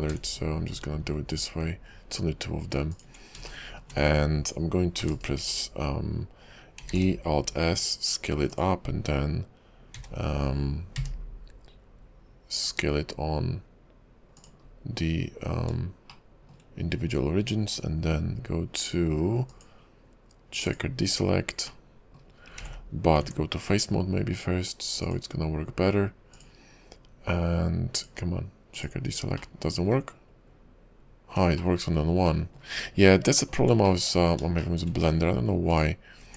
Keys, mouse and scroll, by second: 0.0 ctrl+b, 3.4-3.7 scroll down 2, 3.7 shift+middle click, 3.9-5.0 shift+scroll up 3, 5.1 e, 7.1 alt+s, 10.0 s, 14.8-15.7 scroll down 2, 16.3 shift+middle click, 17.1-17.8 scroll up 2, 19.5 click, 21.9 middle click, 22.5 scroll up 1, 22.7 ctrl+z, 23.2 Tab, 25.1 click, 28.0 click, 29.5 middle click, 30.1-31.0 scroll down 2, 31.7 shift+middle click, 32.5 shift+middle click, 33.2 shift+middle click, 34.1 middle click, 34.8 shift+middle click, 35.7 alt+click.